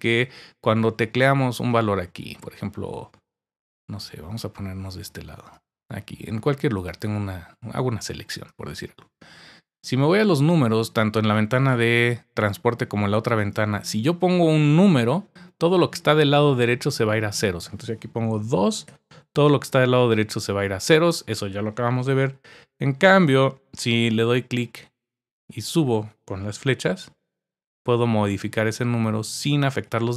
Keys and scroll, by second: 18.9 2, 22.0 Down, 26.8 Up, 27.6 Up, 28.2 Down, 29.6 Up, 29.8 Up, 30.0 Up.